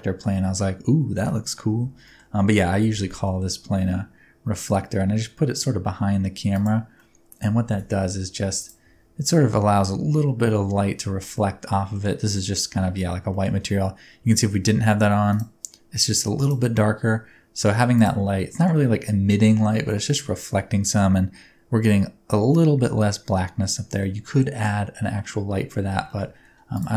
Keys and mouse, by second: 1.4 middle click, 1.7 Tab, 2.1 middle click, 2.8 g, 3.0 y, 3.2 middle click, 6.6 click, 7.0 middle click, 7.6 Tab, 7.7 s, 8.6 click, 8.8 Tab, 11.4-11.9 middle drag, 13.3 middle click, 15.3 click, 16.4 click, 18.0 click, 18.3-18.7 middle drag, 24.0-25.2 middle drag, 25.9 g, 26.1 middle click, 26.8 click.